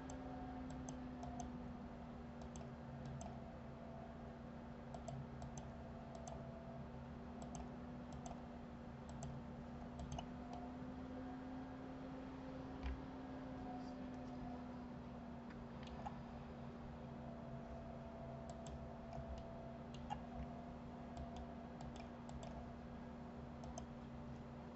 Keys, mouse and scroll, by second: 1.1 click, 1.6 click, 2.8 click, 3.4 click, 5.3 click, 5.8 click, 6.5 click, 7.8 click, 8.5 click, 9.5 click, 10.4 click, 10.9-14.0 middle drag, 18.9 click, 19.7-21.5 middle drag, 21.5 click, 22.2 click, 22.7 click, 24.0 click.